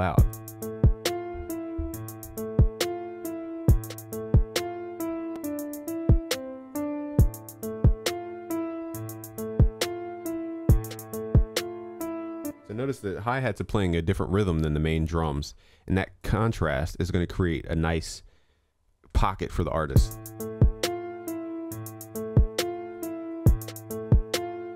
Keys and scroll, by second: 13.4 ctrl+s.